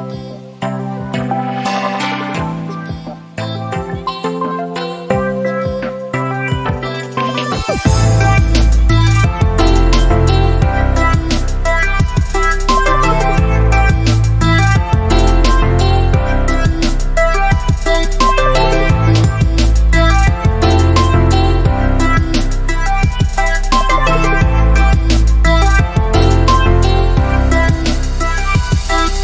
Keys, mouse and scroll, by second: 0.0-0.2 typing, 1.7 click, 3.9-5.1 alt+shift+drag, 5.2 typing, 5.9-6.5 click, 11.4-13.0 typing, 14.5 click, 17.1 right click, 18.3 click, 19.4 right click, 22.1-28.9 drag.